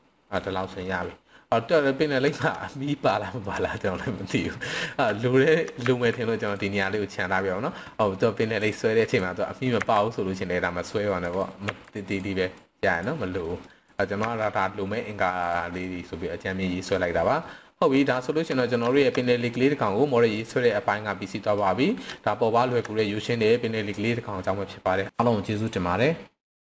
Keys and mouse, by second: 0.8-1.7 middle drag, 2.4 shift+middle click, 2.6-2.9 middle drag, 3.1-3.4 shift+middle drag, 4.1 middle click, 5.1-5.5 shift+middle drag, 5.8 z, 6.4 drag, 6.7-7.3 middle drag, 8.5 click, 9.8 c, 11.3 right click, 11.7 s, 12.1 click, 12.5 click, 13.4 middle click, 14.2 z, 15.9-16.9 middle drag, 17.4-17.8 middle drag, 18.2 shift+middle click, 18.9 shift+middle click, 19.2 middle click, 20.4-21.6 middle drag, 22.2 shift+middle click.